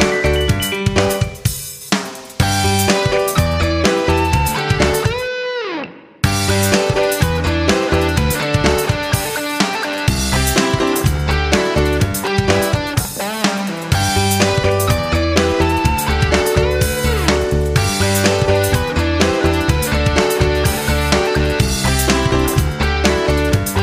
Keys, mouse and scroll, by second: 6.3 ctrl+z, 7.5-20.2 drag, 20.4 ctrl+z, 21.3 ctrl+z, 22.0-23.8 drag.